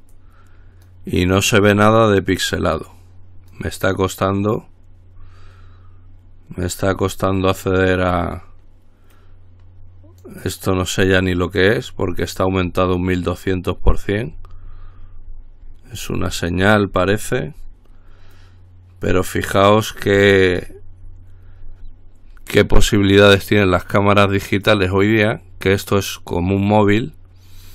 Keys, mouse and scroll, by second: 0.4-1.6 drag, 1.8-3.1 drag, 3.1-4.3 drag, 4.4-8.9 scroll down 1, 9.3-10.9 drag, 11.2-12.4 drag, 12.4-13.0 scroll down 1, 13.0-14.1 drag, 14.2-18.4 scroll down 1, 18.6-20.0 drag, 20.2-22.7 scroll down 1, 23.0-24.5 drag, 24.9-26.0 drag, 26.4-27.7 drag.